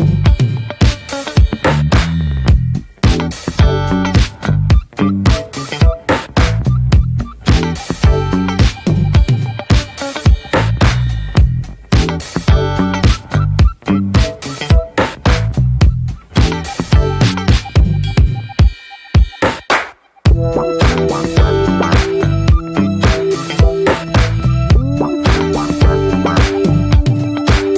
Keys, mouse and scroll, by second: 12.4 scroll down 3, 12.8 middle click, 13.0-13.6 scroll up 3, 13.3 shift+middle click, 13.6 scroll down 2, 13.9 middle click, 14.5-15.1 scroll up 2, 14.7 middle click, 15.1-15.5 scroll down 3, 15.5 shift+middle click, 16.0-16.7 scroll up 4, 16.3 shift+middle click, 16.7 middle click, 17.3 scroll up 1, 17.6 middle click, 18.1-18.7 scroll up 1, 18.7-21.7 shift+middle drag, 24.6 middle click, 25.1 scroll down 1, 25.4 middle click, 25.5-27.2 drag, 27.2-27.7 scroll up 5, 27.4 middle click.